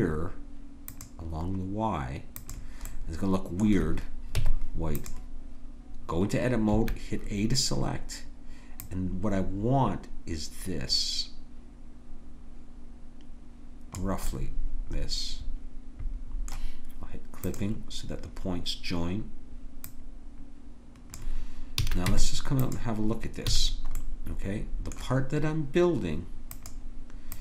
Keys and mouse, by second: 0.9-4.4 drag, 4.4 Tab, 6.7 a, 8.8-13.6 drag, 14.3-16.1 middle drag, 16.1 click, 17.5-19.4 drag, 19.8-21.8 drag, 21.8 a, 22.1 Tab, 23.5 a, 23.7-26.7 middle drag.